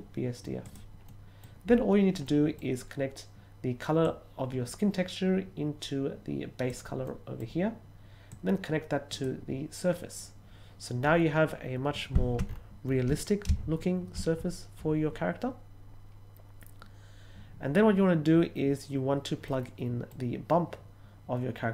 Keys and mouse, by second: 0.6 click, 1.0 middle click, 2.2 middle click, 4.0-6.7 drag, 7.0 middle click, 8.2-9.2 drag, 19.4 middle click.